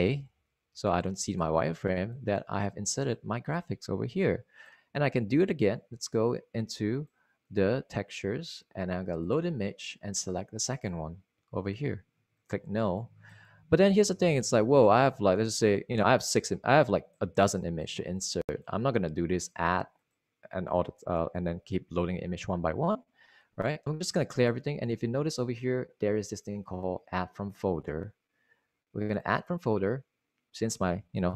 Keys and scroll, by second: 1.0-1.8 typing.